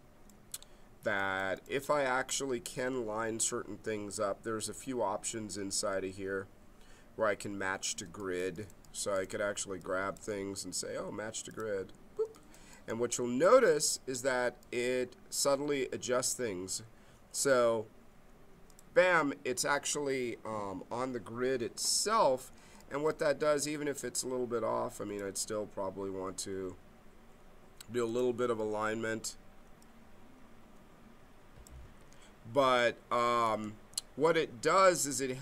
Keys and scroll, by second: 16.6 z, 32.0 g, 33.5 g.